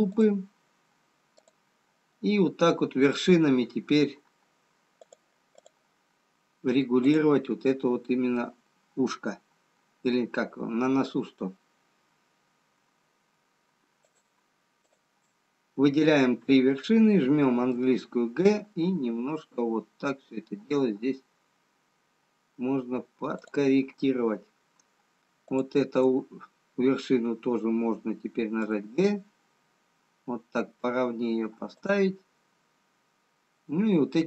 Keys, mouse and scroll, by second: 1.9 click, 5.6 click, 7.4 click, 15.6 shift+click, 18.5 g, 25.5 click, 29.5 g.